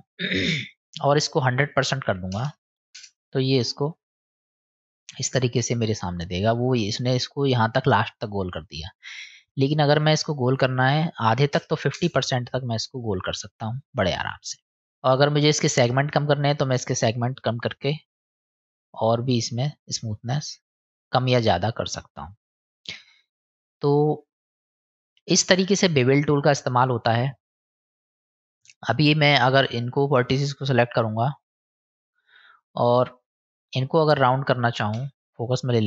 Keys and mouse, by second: 0.6-4.1 drag, 2.4 KP_0, 9.4-12.6 drag, 16.4 click, 16.5 click, 16.7 click, 16.8 click, 17.0 click, 17.2 click, 17.3 click, 17.4 click, 17.6 click, 17.8 click, 17.9 click, 18.1 click, 18.2 click, 18.4 click, 18.6 click, 18.7 click, 18.9 click, 19.1 click, 19.5 click, 20.3-23.4 middle drag, 24.4 middle click, 26.0 middle click, 28.1 middle click, 30.0 click, 31.0 click, 31.6 click, 35.0 KP_Decimal.